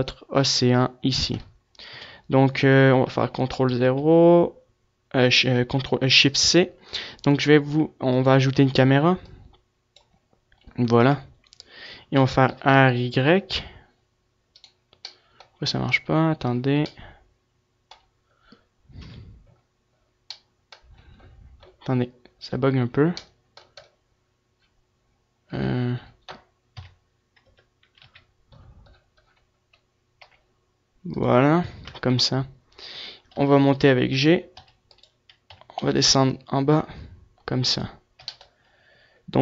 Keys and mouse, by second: 2.2 KP_7, 3.4 shift+c, 4.0 shift+a, 9.7-11.5 drag, 11.5 KP_0, 12.6 r, 17.3 middle click, 19.3 KP_3, 26.9 KP_Decimal, 27.7 KP_0, 28.1 KP_3, 28.3 KP_3, 30.5 r, 31.5 click, 32.0 KP_0, 32.8 click, 33.5 g, 34.4 click, 34.7 g, 35.7 r, 35.7-36.8 drag, 38.0-39.4 drag, 38.4 g.